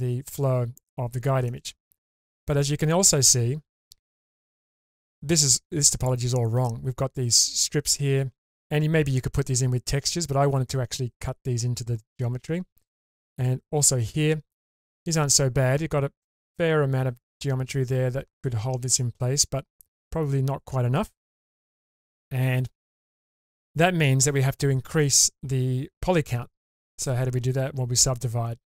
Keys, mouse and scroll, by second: 0.8-1.5 shift+middle drag, 4.9-8.0 scroll up 2, 13.3-13.6 scroll down 2, 15.0 scroll down 1, 20.0-23.0 scroll up 1.